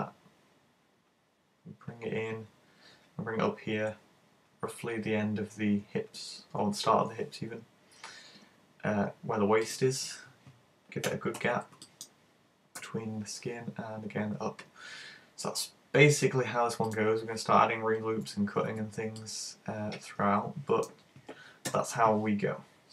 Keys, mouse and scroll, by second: 9.7 click, 11.1 a, 11.3 b, 17.0 click, 18.7 z, 19.2 middle click, 21.7 KP_1.